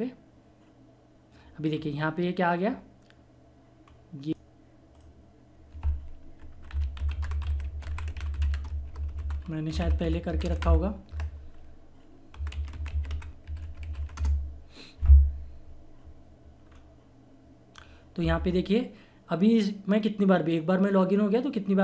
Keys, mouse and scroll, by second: 1.6 scroll down 1, 3.8 scroll up 1, 4.3 click, 6.4-8.7 typing, 10.2-11.1 typing, 12.3-14.3 typing, 16.6 scroll up 1, 17.0 typing, 18.8 typing.